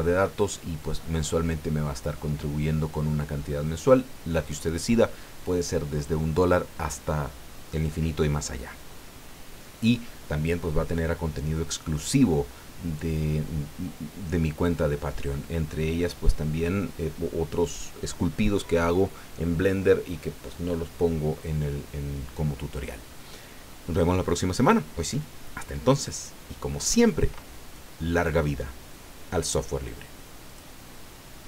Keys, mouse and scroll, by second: 30.5 click.